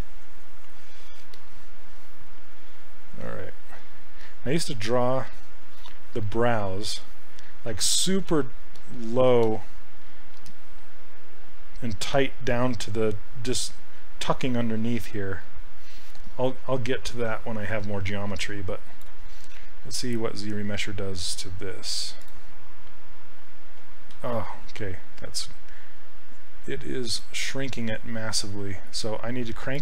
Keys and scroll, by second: 24.2 ctrl+z.